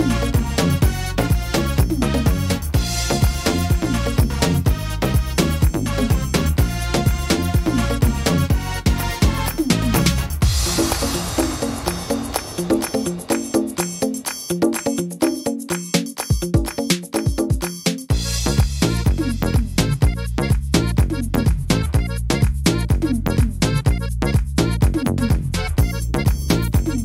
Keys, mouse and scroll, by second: 0.8 click, 5.7 click, 7.9 middle click, 8.7 scroll up 2, 9.0 middle click, 9.4-10.9 scroll down 1, 14.1 click, 15.0 click, 19.3 click, 20.5-21.2 scroll up 4, 21.2-22.3 scroll down 1, 22.3-23.3 scroll down 2, 23.3 middle click, 24.4 ctrl+r.